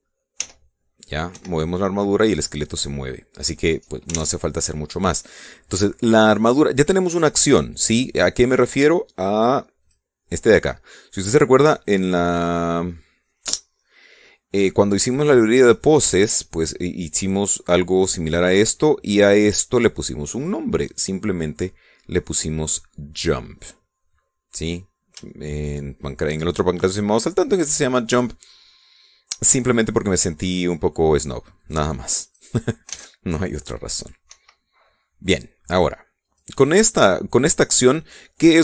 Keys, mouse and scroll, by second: 0.0 ctrl+Tab, 0.3 ctrl+right click, 1.1 r, 2.0 Escape, 4.8 ctrl+Tab, 6.0 middle click, 9.2 click, 10.5 click, 20.2 click, 20.9 click, 25.4 middle click, 26.0-27.1 shift+drag, 32.3 click, 33.0 click, 33.6 alt+a, 35.0 Escape, 37.0 click.